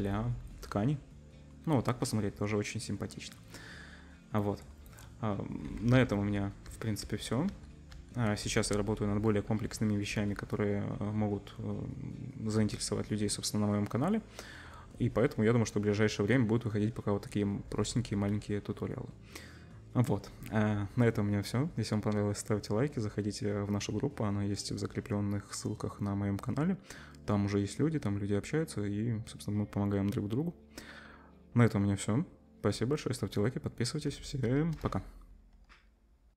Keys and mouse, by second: 5.9 ctrl+z, 6.2 ctrl+z, 6.7 ctrl+z, 7.0 ctrl+z, 7.5 ctrl+z, 7.9 ctrl+z, 9.6 ctrl+z, 10.1 ctrl+z, 32.5-34.8 drag, 32.5-34.8 middle drag, 32.5-34.8 right drag.